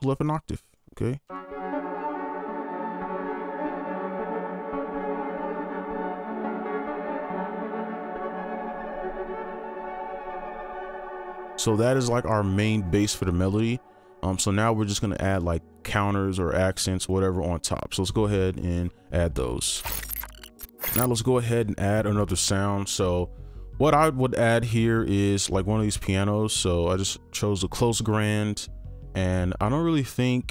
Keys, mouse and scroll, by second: 0.2 right click, 10.9 space, 14.4 double click.